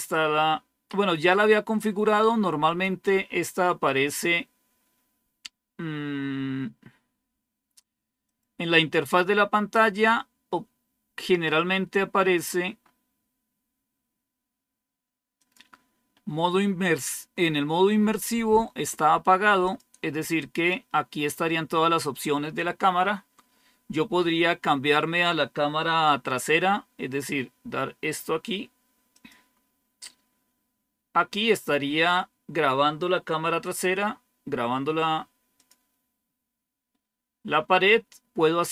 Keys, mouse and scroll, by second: 2.5 click, 8.1 click, 11.8 scroll down 3, 12.6 scroll down 1, 12.7-13.6 scroll up 2, 15.3 click, 16.9 click, 19.5 click, 19.9 click, 20.5 click, 29.0 click, 35.5 click, 36.0 click.